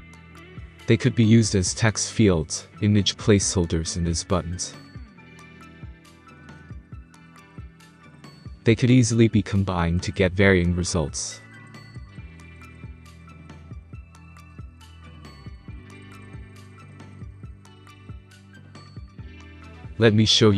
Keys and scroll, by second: 6.0 space, 8.2-8.6 space, 14.1 space, 16.0 6, 16.1 Return, 17.3-18.2 typing, 19.5 alt+Tab.